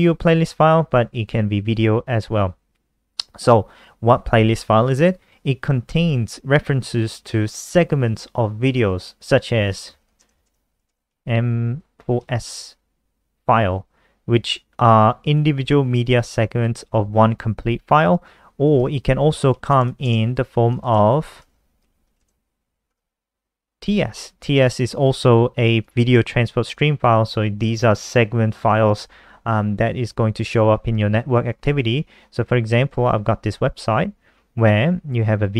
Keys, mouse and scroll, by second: 9.4-12.3 typing, 15.1 click, 18.6 ctrl+t, 18.9-22.4 typing, 22.7 Return, 25.6 click, 33.4-34.4 scroll down 7, 35.1 scroll up 1, 35.3 click.